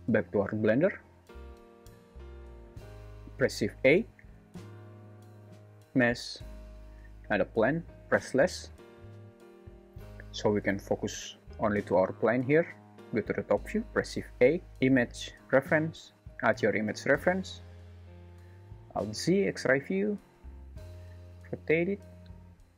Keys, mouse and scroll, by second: 3.5 shift+a, 8.3 /, 14.0 shift+a, 18.7 alt+z, 20.9 r.